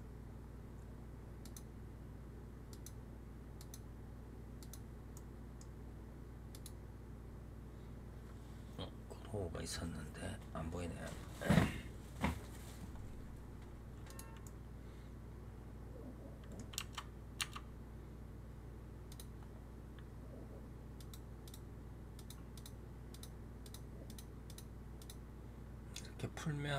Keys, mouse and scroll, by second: 1.3-5.0 drag, 5.0-6.4 middle drag, 6.4-9.4 drag, 13.9 click, 14.3-16.7 middle drag, 16.7 Tab, 17.3 Tab, 19.0 click, 20.8 click, 21.3 click, 22.1 click, 22.4 click, 23.0 click, 23.5 click, 23.9 click, 24.3 click, 24.9 click, 25.3 scroll down 2, 26.6 scroll down 8.